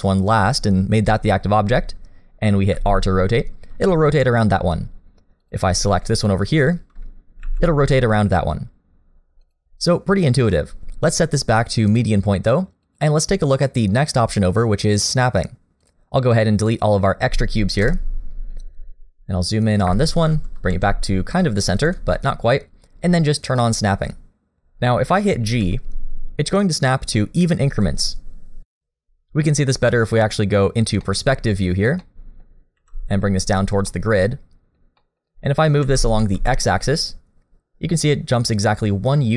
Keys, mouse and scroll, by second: 6.2 shift+click, 7.4 r, 11.9 click, 15.8 click, 17.8 Delete, 18.5-19.9 scroll up 2, 19.9 click, 20.7 g, 22.2 shift+middle click, 22.4-23.6 scroll up 1, 23.6 click, 25.6 g, 31.0 middle click, 31.8 scroll down 2, 32.0 middle click, 32.7 g, 33.9 middle click, 35.0 middle click, 35.3-35.8 scroll up 1, 35.8-37.9 scroll up 1, 35.8 g.